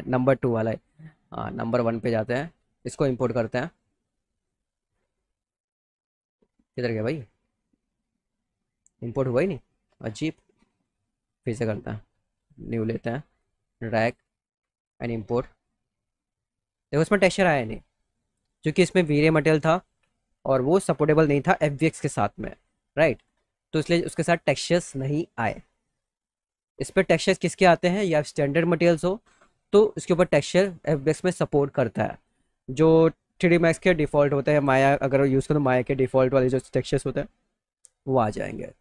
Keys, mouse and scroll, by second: 0.7 click, 2.8 click, 6.7 middle click, 7.2 middle click, 7.4 middle click, 8.8 click, 9.5 click, 10.1 click, 10.8 click, 11.2 click, 12.4 click, 13.4 click, 14.8 click, 16.7 click, 17.6 click, 19.4 click, 23.2 click, 23.7 click, 26.4 click, 29.5 click, 32.4 click.